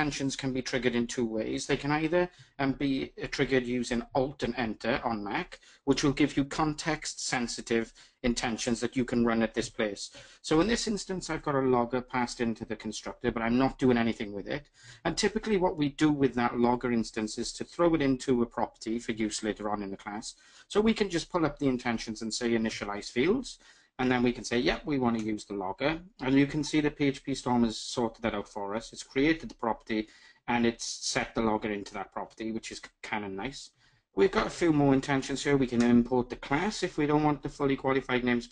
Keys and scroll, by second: 3.6 alt+Return, 33.5 alt+Return.